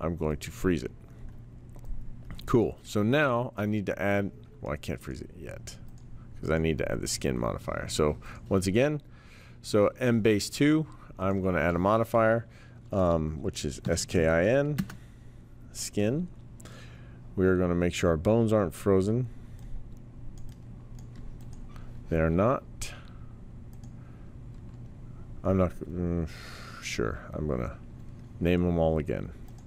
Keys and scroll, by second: 13.6-14.6 typing, 14.8 Return.